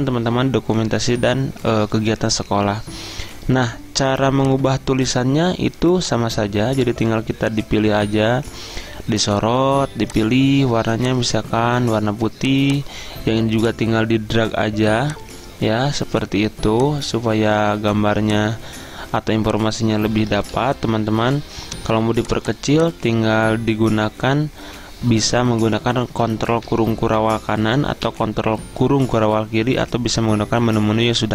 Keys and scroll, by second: 20.6 ctrl+a, 26.7 ctrl+], 27.3 ctrl+], 28.1 ctrl+[.